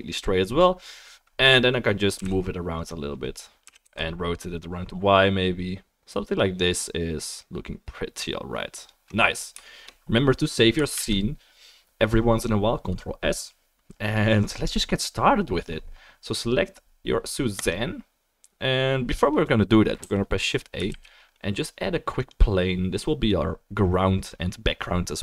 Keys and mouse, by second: 2.1 g, 2.8 middle click, 3.6 r, 9.6-22.8 shift+middle drag, 11.0 ctrl+s, 20.0 a, 20.9 shift+a.